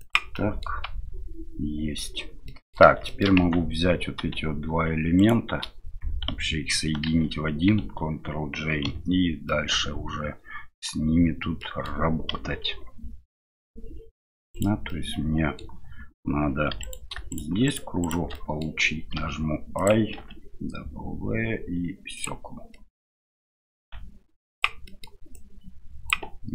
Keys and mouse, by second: 0.5 middle click, 2.6 click, 3.0 shift+middle click, 3.4 Tab, 7.0 ctrl+j, 8.8 KP_Divide, 9.5-10.8 middle drag, 11.6 middle click, 13.3 KP_7, 14.9 middle click, 16.8 right click, 17.6 right click, 18.0 right click, 18.3 middle click, 19.2 i, 22.9 middle click, 23.8 s, 25.0 middle click, 25.3-26.5 drag.